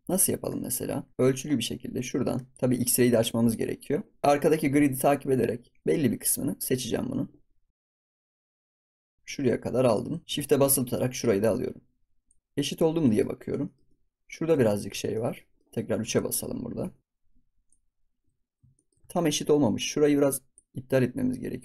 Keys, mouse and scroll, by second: 0.5 shift+middle click, 0.8-2.4 scroll down 4, 2.4 click, 3.4 click, 4.8-5.8 scroll down 2, 5.8 click, 11.1 shift+click, 12.4-12.7 scroll up 4, 12.7 scroll down 2, 13.0 middle click, 13.3 scroll up 2, 13.6 shift+middle click, 14.3 scroll down 2, 14.6-15.9 shift+middle drag, 15.9 KP_3, 16.5 scroll up 5, 16.9 shift+middle click, 17.0 shift+click, 18.4-19.7 scroll down 5, 18.7 shift+middle click, 20.5 ctrl+click.